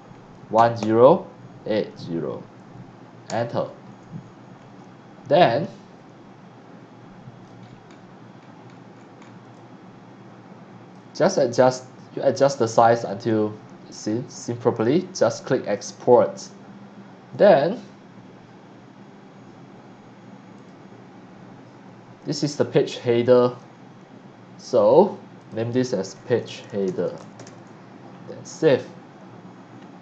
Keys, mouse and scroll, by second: 0.5 KP_1, 0.8 KP_0, 1.7 KP_8, 1.9 KP_0, 3.3 KP_Enter, 4.2 scroll up 1, 4.5-5.0 scroll down 2, 5.3-7.4 drag, 5.4 x, 5.9 c, 7.6-7.9 scroll down 2, 8.4 scroll up 1, 8.6-9.3 scroll down 3, 9.5-10.9 drag, 9.5 x, 11.6 scroll down 1, 11.8 scroll up 1, 11.9 middle click, 12.1 middle click, 12.3 c, 12.4-14.7 drag, 15.7 click, 20.5 click, 25.4 click, 25.9-27.9 typing, 28.7 click.